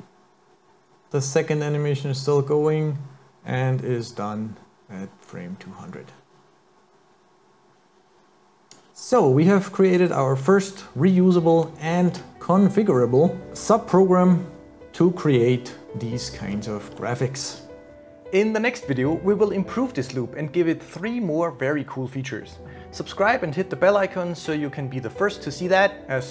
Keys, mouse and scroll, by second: 9.8-10.4 scroll down 5, 10.5 middle click, 11.9-12.4 scroll up 6, 16.5 scroll down 5, 17.0 middle click.